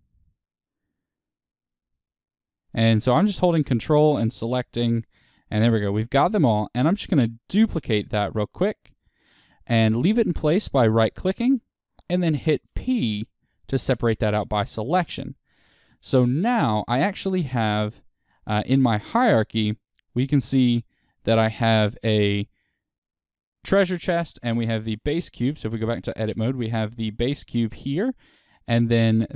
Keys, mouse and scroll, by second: 7.5 shift+d, 8.9-13.6 right drag, 13.6 p, 20.2 click, 25.1 Tab, 26.6 click.